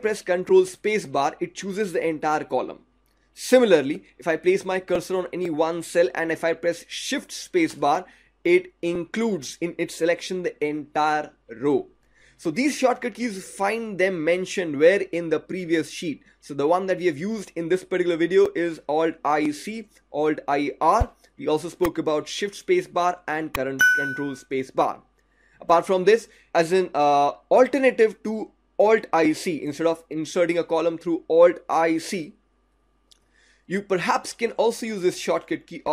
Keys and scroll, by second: 0.3 ctrl+space, 7.6 shift+space.